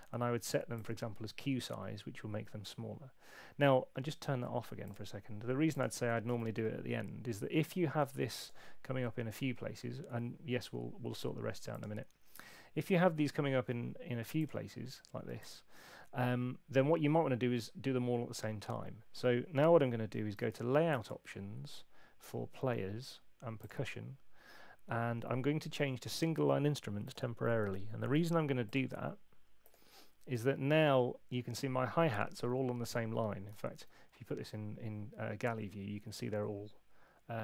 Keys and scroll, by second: 6.3 super+8, 20.4 shift+super+l, 33.7 alt+super+2.